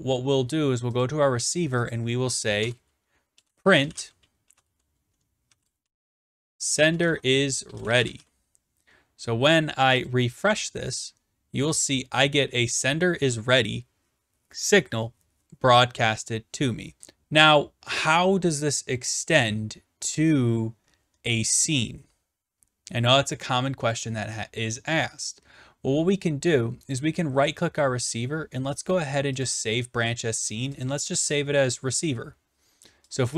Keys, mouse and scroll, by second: 1.0 click, 1.9 click, 2.6 Return, 3.1-8.7 typing, 10.2 click, 17.5 click, 27.0 right click, 29.4-30.6 drag, 30.8-31.9 drag, 33.3 click.